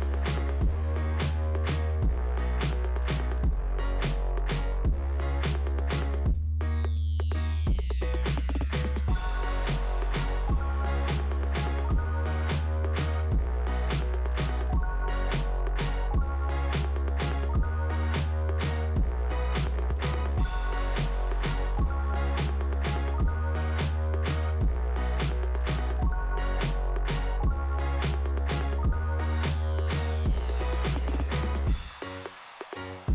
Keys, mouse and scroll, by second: 3.2 scroll down 2, 4.1-4.5 scroll down 2, 4.1 click, 4.5 click, 7.6-8.1 scroll down 3, 9.3 scroll up 1, 12.7 click, 13.9 click, 15.5 click, 15.9 click, 16.0 double click, 18.1 click, 20.6 click, 22.2-23.3 scroll down 1, 23.3 click, 24.2 scroll down 3, 26.5 click, 28.8 scroll down 1, 31.3 middle click, 32.1-32.5 scroll down 2.